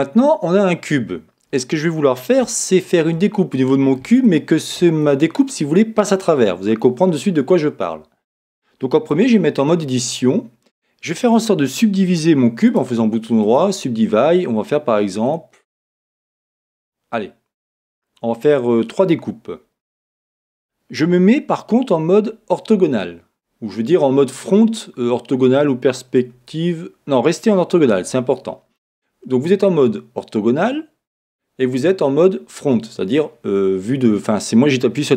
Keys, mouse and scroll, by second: 9.1 Tab, 12.7 right click, 15.2-17.2 drag.